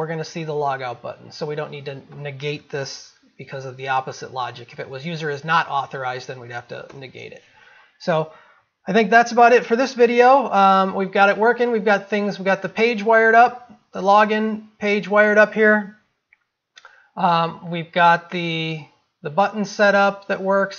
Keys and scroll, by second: 9.2 ctrl+s.